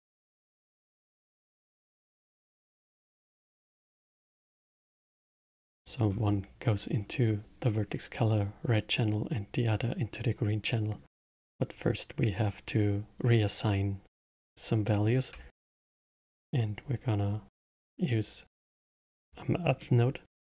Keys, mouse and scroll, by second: 3.8 middle click, 4.4-4.8 scroll down 3, 4.8-6.1 middle drag, 6.1 scroll up 4, 8.6 click, 9.5-10.6 drag, 10.6 middle click, 11.5 click, 13.1 click, 14.8 middle click, 15.4 shift+a, 19.7 middle click.